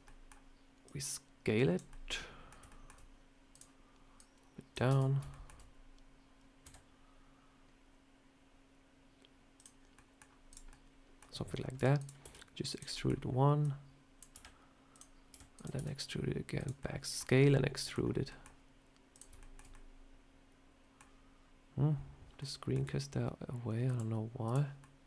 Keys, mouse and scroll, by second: 24.7 middle click.